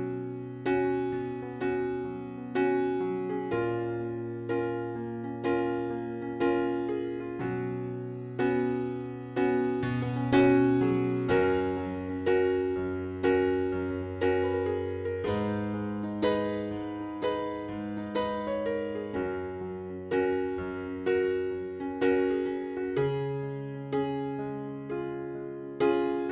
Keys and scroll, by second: 2.5 f, 2.9 z, 3.7 alt+q, 4.6 p, 5.6 F4, 5.9 ctrl+v, 6.8 alt+q, 11.6 alt+r, 12.0 Delete, 13.2 alt+r, 13.5 Delete, 15.4 alt+r, 15.9 Delete, 19.8 Delete, 22.3 alt+r, 22.6 Delete, 23.4 Delete, 24.2 Escape.